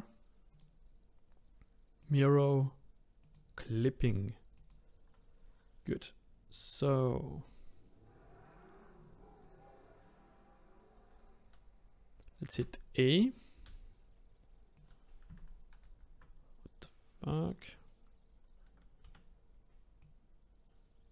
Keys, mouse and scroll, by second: 0.5-3.3 drag, 4.5 click, 5.4-8.6 scroll up 3, 12.5 a, 13.6 s, 15.8 ctrl+z, 17.4 click, 19.0 a, 20.0 click.